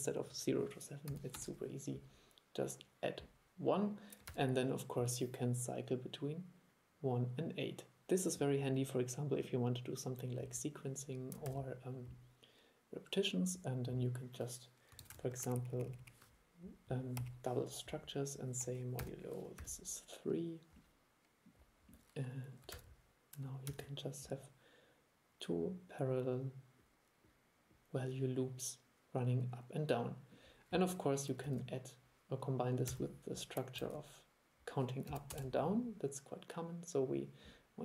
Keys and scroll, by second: 4.4 super+e, 11.6 super+e, 15.1 super+c, 15.3 super+v, 22.8 super+3, 23.8 super+e, 31.6 super+1, 33.9 super+1.